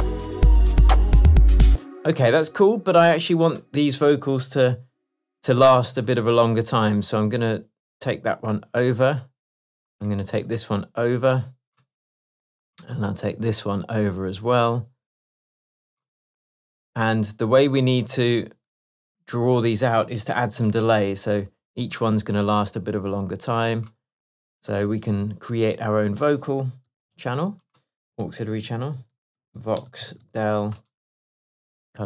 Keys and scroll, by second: 1.7 space, 7.0 super+e, 10.6 super+e, 13.4 super+e, 25.3 Tab, 27.2 alt+super+t, 28.3 super+r, 29.0 shift+super+v, 29.4-30.8 typing, 31.4 Return.